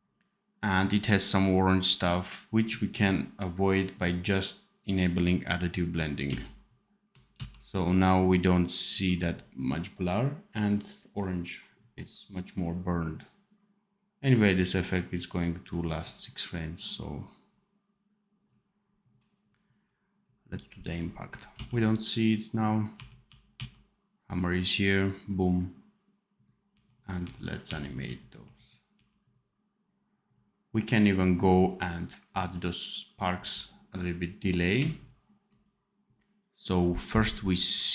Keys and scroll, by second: 6.2 space, 7.3 ctrl+s, 20.5-21.4 typing, 22.8 r, 26.6 r, 27.2 r, 28.4 r.